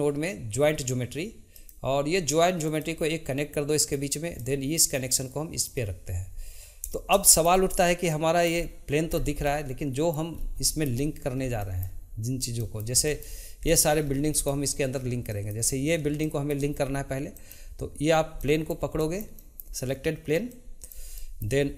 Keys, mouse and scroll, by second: 4.4-7.2 drag, 7.2-8.1 shift+middle drag, 8.1-9.1 drag, 9.1-9.5 scroll down 1, 9.5-10.3 middle drag, 10.3-10.6 scroll up 2, 10.6-14.0 shift+middle drag, 14.0-14.3 scroll up 1, 14.3-15.3 shift+middle drag, 15.3 click, 16.2-17.3 shift+middle drag, 17.3 click, 18.4-20.5 middle drag, 20.5 click, 21.2-21.7 shift+middle drag.